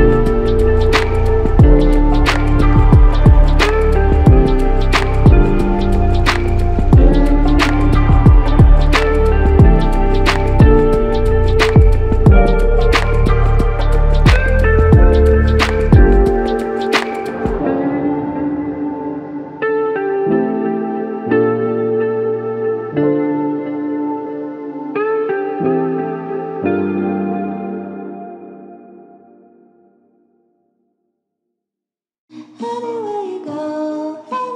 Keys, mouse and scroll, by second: 0.2 ctrl+alt+click, 3.5 double click, 10.0 double click, 15.7 alt+click, 20.5 ctrl+alt+click, 27.6 alt+click, 29.1 ctrl+click, 30.3 ctrl+click, 32.7 shift+click.